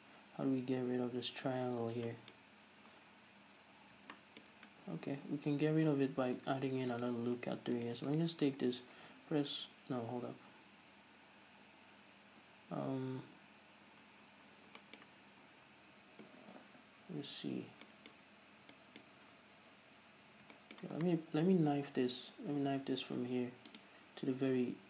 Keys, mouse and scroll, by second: 2.4-8.0 shift+middle drag, 3.0-3.9 scroll up 1, 3.9 scroll down 1, 5.1 scroll down 1, 5.4-6.5 scroll up 1, 6.5 ctrl+r, 7.3 right click, 7.5 scroll up 1, 8.0 right click, 8.1 middle click, 8.4 shift+right click, 8.5-10.1 middle drag, 9.2 alt+m, 14.3 scroll down 2, 14.5-15.1 scroll up 2, 15.2-24.8 middle drag, 15.7-16.6 scroll down 2, 16.6-17.7 scroll down 1, 17.7-18.1 scroll up 2, 19.4-20.0 scroll up 2, 20.0 scroll down 2, 20.3-20.8 scroll up 2, 22.7 k.